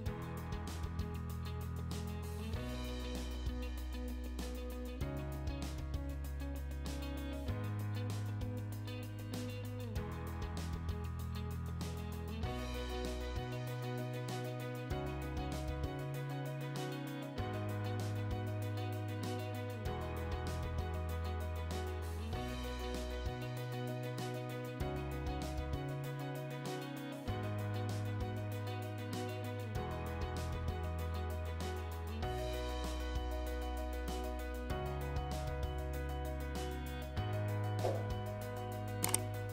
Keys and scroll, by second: 5.8 Escape, 7.9-8.9 typing, 11.7 Escape, 12.4 ctrl+z, 21.2 Escape, 27.5 space, 28.2 Escape, 39.3 Escape.